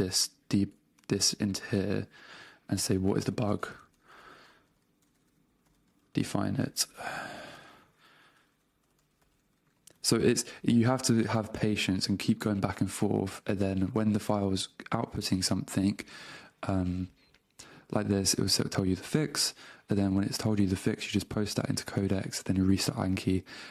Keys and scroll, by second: 0.1 super+v, 2.2 super+Tab, 3.8-5.8 typing, 6.9 BackSpace, 8.6 alt+BackSpace, 9.5 space, 10.0 super+v, 10.3 Return.